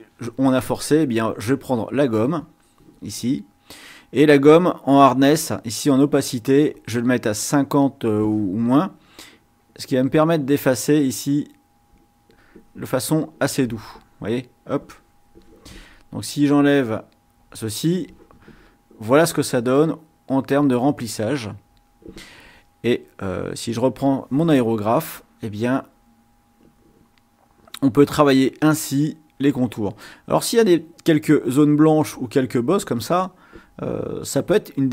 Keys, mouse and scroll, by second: 2.5 click, 6.8-8.2 drag, 9.3 click, 10.7-13.1 drag, 13.6 click, 16.2 click, 19.5-20.9 drag, 25.4 click, 26.4 click, 27.2-28.9 drag, 29.2 click, 30.6-31.8 drag, 32.1 click, 32.8 click, 34.7 click.